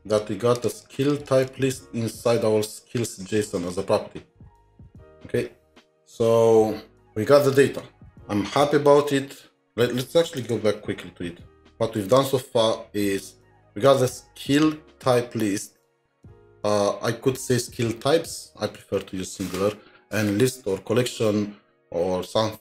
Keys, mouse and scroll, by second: 0.7 double click, 1.1-1.9 typing, 1.8 ctrl+scroll up 2, 2.4-3.8 scroll up 1, 5.5-6.4 scroll up 9, 10.3 scroll, 10.6 ctrl+Tab.